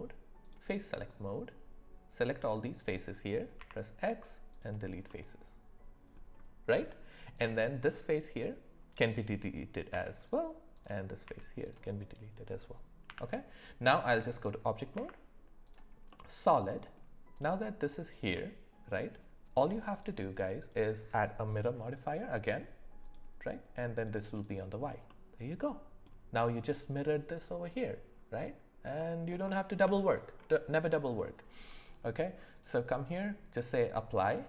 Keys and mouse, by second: 0.5-2.9 drag, 3.6 x, 5.1-6.1 middle drag, 7.3 click, 9.9 x, 10.7 click, 11.2 x, 13.0 Tab, 14.9 z, 16.1-17.0 middle drag, 17.3 click, 18.3 middle click, 19.9-23.2 drag, 24.0 click, 24.3 click, 25.1 middle click, 29.0 middle click, 29.5 shift+middle click, 32.5 click.